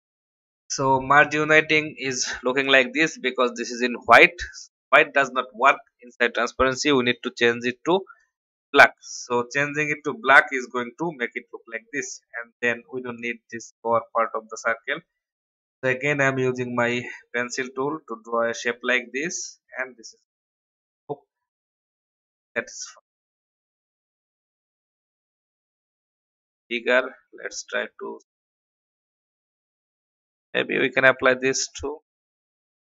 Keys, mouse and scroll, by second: 7.1 click, 11.4 alt+scroll up 1, 12.3 scroll down 1, 12.7 click, 15.3 n, 16.0-19.1 drag, 19.3 v, 20.4 click, 25.2 shift+click, 26.6-27.4 scroll down 1, 30.1 click.